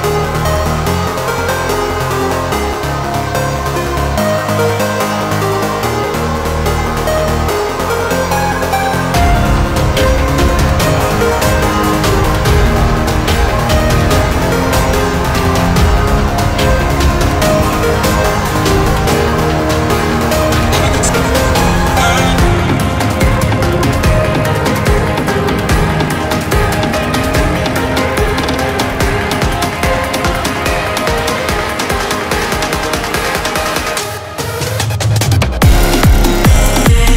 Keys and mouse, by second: 0.2 click, 5.2 click, 6.6 ctrl+t, 7.2-8.8 drag, 8.8 Return, 11.5-27.6 drag, 31.4 Delete, 32.3 ctrl+d, 33.6 click, 35.3 ctrl+t, 36.8-37.1 drag.